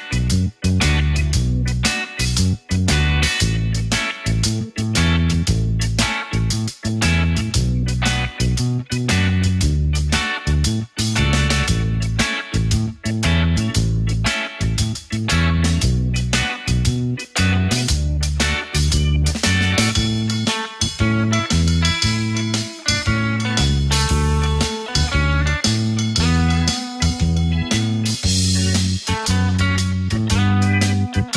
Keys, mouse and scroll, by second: 0.3 click, 1.6 click, 4.5-7.1 drag, 7.1 e, 10.6-11.7 scroll down 1, 11.7 click, 13.3 click, 13.9 click, 14.9 click, 15.7 click, 16.0-18.3 scroll up 4, 18.4 click, 19.5 alt+click, 20.7-22.5 drag, 22.5 ctrl+b, 27.0 click, 28.5 shift+click, 29.7 click, 30.7 shift+click.